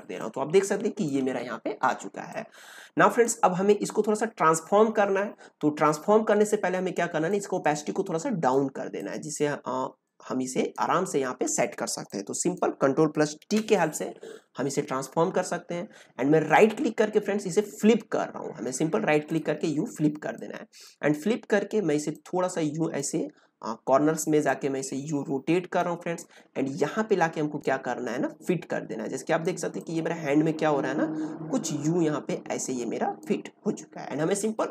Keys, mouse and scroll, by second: 0.2-5.4 drag, 7.2-13.3 drag, 13.3 ctrl+t, 16.4 right click, 19.2-34.7 drag.